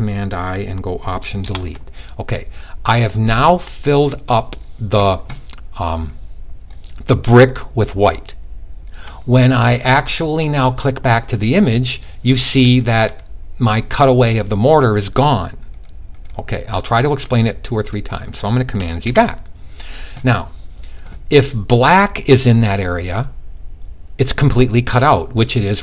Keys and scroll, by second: 18.5 super+z.